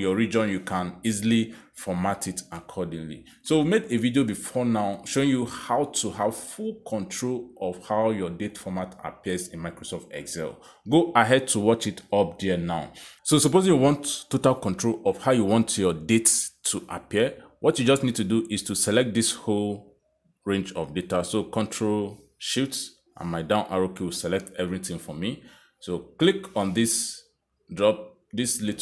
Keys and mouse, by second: 0.2 click, 1.5 click, 7.7 click, 8.7 click, 9.6 click, 16.0 click, 19.1 click, 21.4 click, 22.8 ctrl+shift+Down.